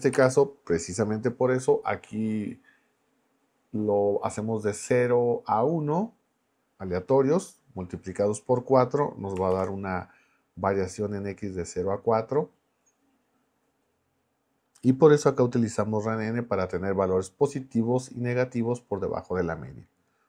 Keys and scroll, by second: 0.1 BackSpace, 9.5 shift+Return.